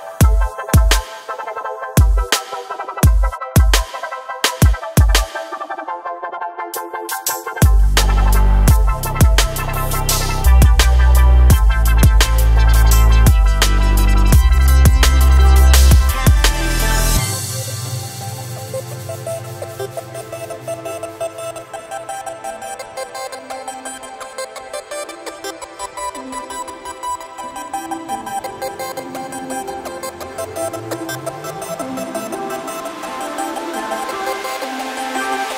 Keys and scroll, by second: 3.2 e, 7.6 e, 11.2 s.